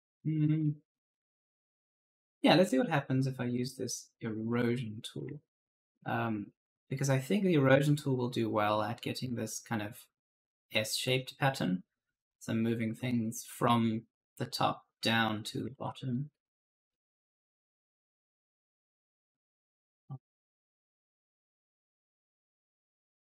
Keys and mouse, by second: 0.0-0.8 typing, 4.5 click, 5.2 alt+Tab, 15.6 alt+Tab, 16.0-16.7 typing, 16.1 right click, 17.1 click, 19.0 click, 20.1 click, 22.2-23.4 typing, 22.4 right click.